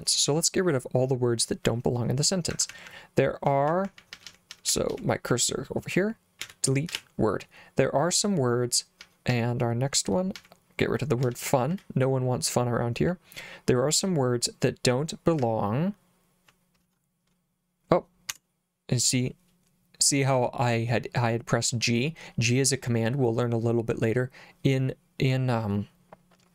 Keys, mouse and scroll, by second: 2.5-4.9 typing, 6.4 d, 6.9 w, 9.0 l, 9.3 l, 10.3 l, 11.2 d, 11.7 w, 15.4 l, 16.6-17.4 typing, 18.3 Escape.